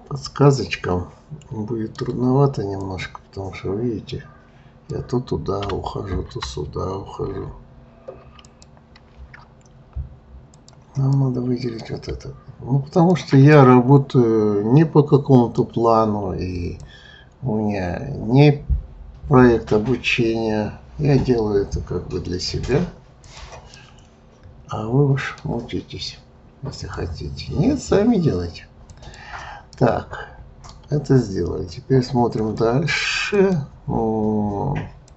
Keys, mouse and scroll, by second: 2.8 click, 5.7 Escape, 7.3 ctrl+z, 8.5 click, 10.4 click, 11.1-12.9 middle drag, 12.9 shift+click, 13.5-16.6 middle drag, 16.8 click, 23.2 click, 23.8-26.7 middle drag, 26.7 click, 28.9 click, 29.7-33.5 middle drag.